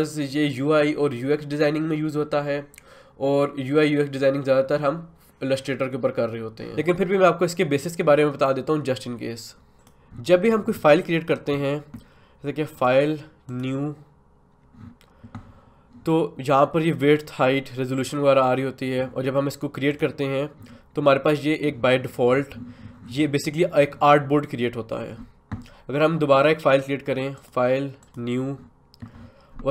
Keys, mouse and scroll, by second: 9.8 click, 12.7 click, 19.9 click, 27.3 click.